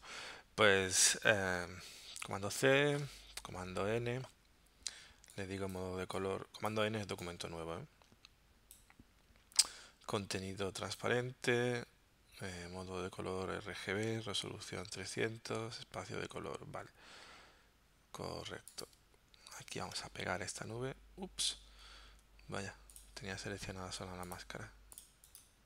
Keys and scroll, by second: 2.2 super+c, 3.3 super+n, 19.8 super+v, 21.7 super+z.